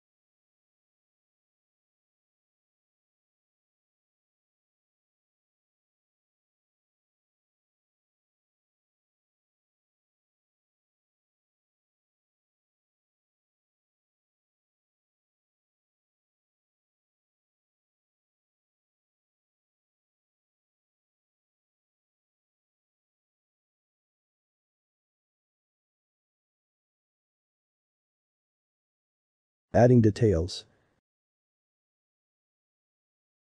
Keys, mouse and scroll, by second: 0.1 a, 0.4 s, 4.8 ctrl+r, 5.7 ctrl+b, 11.7 middle click, 12.5 Tab, 13.1 click, 13.5 shift+click, 14.0 e, 16.6 middle click, 17.1 a, 17.4 s, 20.3-23.5 middle drag, 23.5 ctrl+r, 24.4 shift+middle click, 25.0 ctrl+b, 29.5-30.5 middle drag, 30.5 ctrl+r.